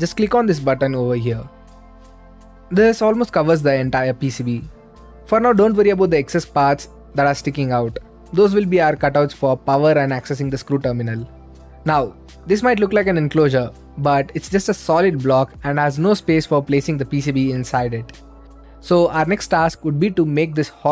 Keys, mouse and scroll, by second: 0.0 click, 1.7-2.8 drag, 3.2-4.4 right drag, 4.4 middle click, 5.4-14.2 right drag, 14.2 middle click, 15.0 scroll down 2, 15.1-16.3 scroll up 2, 17.2-17.6 scroll down 2, 17.6-20.9 right drag.